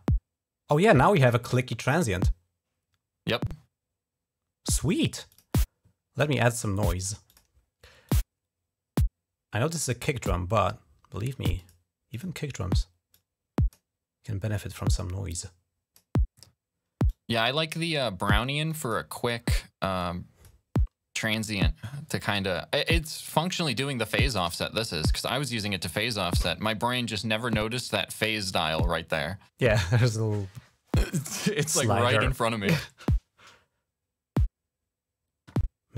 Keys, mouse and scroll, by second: 5.1 click, 7.0 click, 7.9-9.6 drag, 11.4 click, 11.9 click, 12.9 click, 14.3 click, 15.0 click, 16.8 click, 18.5 click, 18.6 click, 18.9 click, 19.8 click, 21.3 click, 23.4 click.